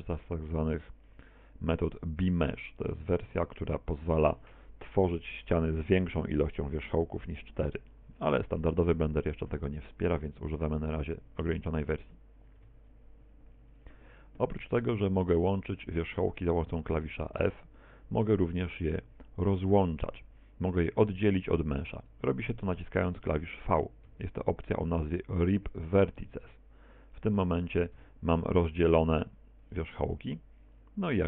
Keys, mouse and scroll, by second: 1.1 middle click, 3.4 Tab, 9.0 middle click, 10.2 shift+middle click, 11.6-12.5 scroll up 1, 12.6 Tab, 13.8 right click, 15.8 shift+right click, 16.4 shift+right click, 17.3 f, 20.7 a, 22.0 right click, 24.1 v, 25.7 click, 26.2 right click, 26.5 v, 27.2 click, 27.7 right click, 28.0 v, 29.5 click, 29.7 right click, 29.9 v, 30.8 click.